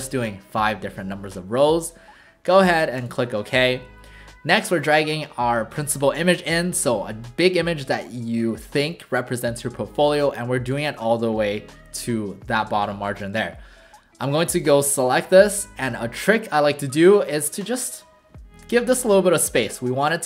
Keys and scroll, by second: 13.3 v.